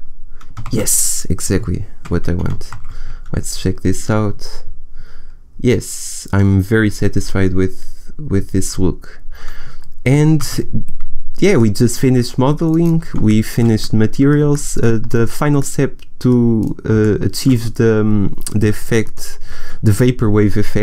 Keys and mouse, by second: 0.6 shift+z, 1.4 KP_0, 2.8 shift+z.